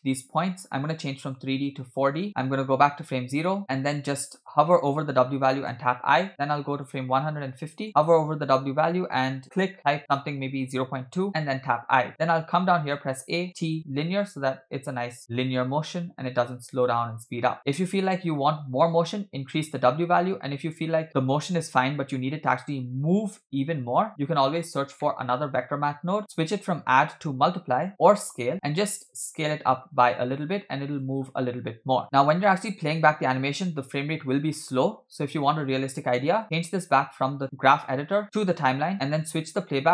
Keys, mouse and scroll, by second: 0.6-1.2 scroll up 1, 1.2 scroll up 1, 1.2-2.3 drag, 2.6 click, 3.5 middle click, 3.6 click, 5.7 i, 6.7 click, 7.7 click, 8.4-10.2 drag, 11.4 i, 12.8 a, 13.5 t, 15.3 click, 16.1 space, 24.3 space, 24.6-25.0 scroll down 2, 25.0 middle click, 25.5 shift+a, 26.2 click, 26.8-28.4 drag, 29.0 click, 29.8 click, 30.9-32.0 drag, 32.0 space, 35.7 space, 36.6 click, 38.2 click, 39.2-39.9 drag.